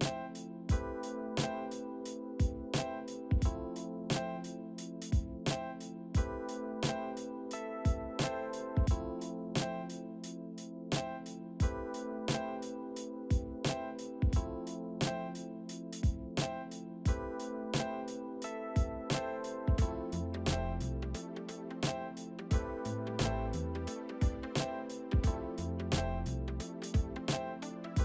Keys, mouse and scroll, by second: 11.4 right click, 17.6 alt+shift+middle click, 18.5 alt+shift+middle click, 19.8 alt+shift+middle click, 20.9 alt+shift+middle click, 21.5 alt+shift+middle click, 21.8 alt+shift+middle click, 22.5 alt+shift+middle click, 23.7 alt+a, 23.8 alt+click, 24.8 double click, 26.5 alt+shift+middle click.